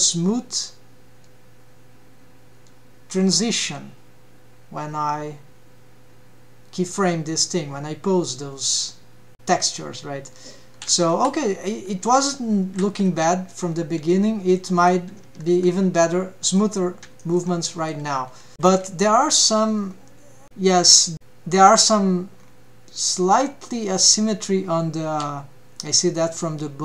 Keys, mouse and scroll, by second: 12.1 a, 12.7 alt+q, 12.9 alt+q, 14.2-14.6 scroll up 1, 14.6-15.0 middle drag, 15.6 ctrl+Tab, 16.1 scroll down 1, 16.5 middle click, 17.2 shift+middle click, 17.6 middle click, 18.2 scroll down 1, 18.5 middle click, 18.8 KP_1, 19.9 scroll up 1, 22.4-22.9 scroll down 3, 23.0 scroll up 3.